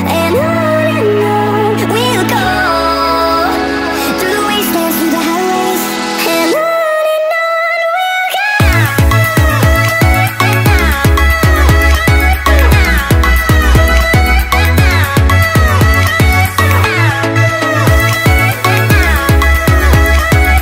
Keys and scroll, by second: 8.8 z, 8.9 z, 8.9-12.6 space, 12.6 z, 15.2 ctrl+0, 15.4-15.9 z, 16.1 space.